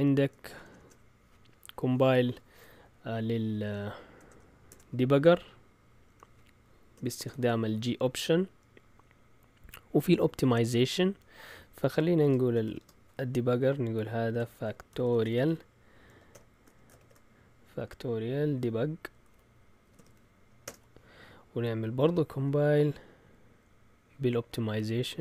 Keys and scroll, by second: 0.6 BackSpace, 0.7 BackSpace, 4.7 BackSpace, 6.1 End, 6.9 typing, 12.4-17.5 typing, 18.9-20.6 typing, 20.6 Return, 21.8 Up, 24.4 Left, 24.9-25.2 typing.